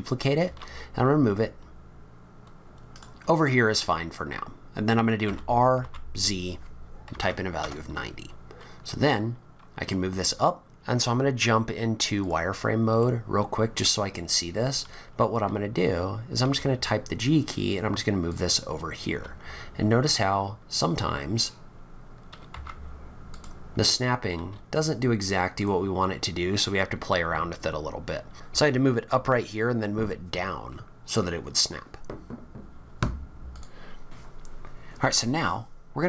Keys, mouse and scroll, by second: 0.4 shift+d, 5.2 r, 10.6 middle click, 10.6 scroll down 4, 12.3 click, 13.0 middle click, 14.1-14.5 scroll up 7, 16.4 g, 19.1 g, 23.7 scroll up 4, 24.3 g, 26.1-26.6 scroll down 1, 26.6-27.2 scroll down 6.